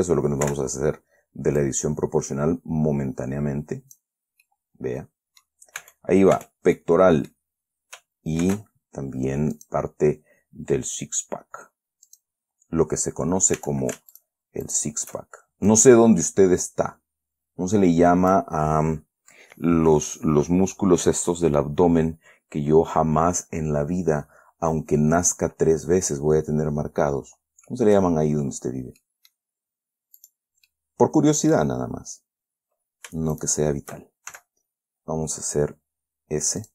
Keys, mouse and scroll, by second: 0.2 ctrl+z, 1.9-4.5 drag, 4.5-4.8 scroll down 2, 4.8-6.0 middle drag, 6.1 Tab, 7.1 middle click, 8.8 ctrl+r, 9.9 click, 12.4 click, 13.9 a, 14.5 alt+shift+right click, 14.5 alt+shift+click, 15.0 alt+shift+click, 16.0-18.9 drag, 18.9 middle click, 19.3 scroll down 1, 19.6-20.7 middle drag, 20.7 scroll down 1, 20.9 scroll up 1, 21.9-28.5 middle drag, 28.5-28.9 scroll up 1, 29.3 middle click, 30.5 click, 31.0-32.1 middle drag, 33.7 shift+right click, 34.6 shift+s.